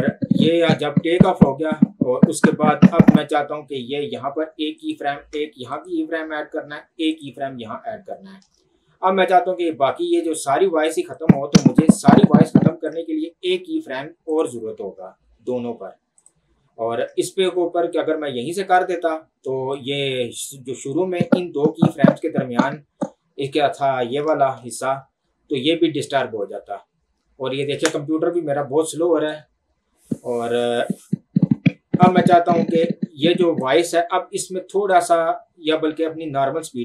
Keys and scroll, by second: 24.7 ctrl+2, 28.2 Escape.